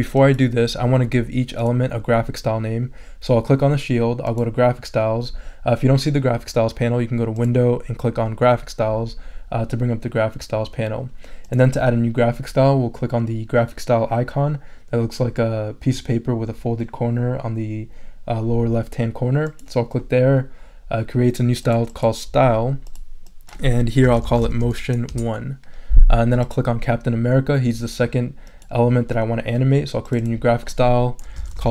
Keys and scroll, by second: 23.8-25.1 typing, 31.1-31.7 typing.